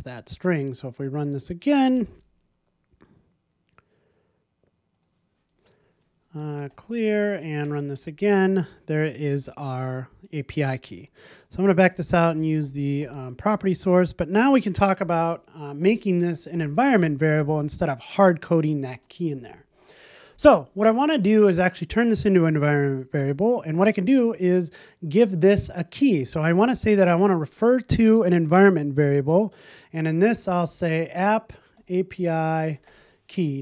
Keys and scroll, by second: 1.5 ctrl+r, 10.2 shift+Escape, 12.6 super+z, 13.5 super+z, 15.0 super+z, 15.8 super+z, 16.5 super+z, 17.3 super+z, 19.7 super+s.